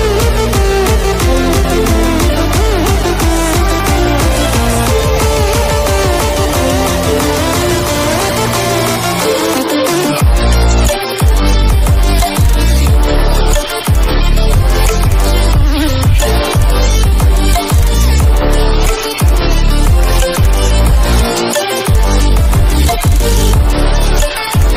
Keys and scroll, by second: 3.8 ctrl+=.